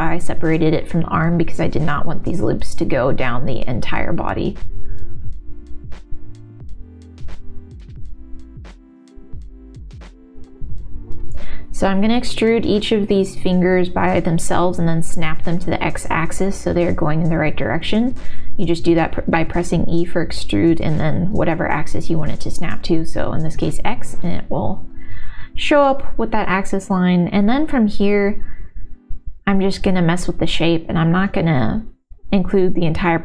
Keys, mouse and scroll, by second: 0.5 click, 1.1 click, 2.4 shift+v, 3.9 space, 4.1 shift+v, 4.6 2, 4.9 shift+v, 5.5 middle click, 5.8 alt+click, 6.1 shift+v, 7.6 shift+v, 8.1 3, 8.5 shift+click, 9.5 s, 10.5 middle click, 11.6 middle click, 12.2 e, 13.1 ctrl+z, 13.1 middle click, 13.6 e, 16.5 middle click, 17.1 e, 19.9 middle click, 21.0 e, 26.5 middle click, 26.5 g, 28.2 s, 28.3 middle click, 28.5 click, 28.9 s, 29.5 s, 31.0 s, 31.2 click, 31.6 ctrl+s, 31.6 middle click.